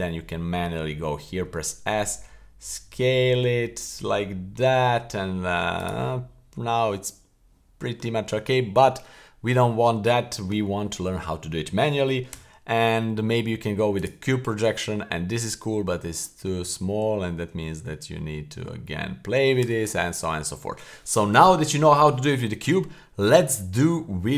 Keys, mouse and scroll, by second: 1.4 s, 6.3-7.9 scroll up 4, 7.9-8.6 scroll down 6, 8.6 middle click, 9.1-10.2 scroll up 3, 12.3 u, 15.0-15.4 scroll down 2, 15.4-16.4 scroll up 3, 16.4-17.0 scroll down 2, 17.0-17.4 scroll up 2, 17.4 s, 20.2 scroll down 1.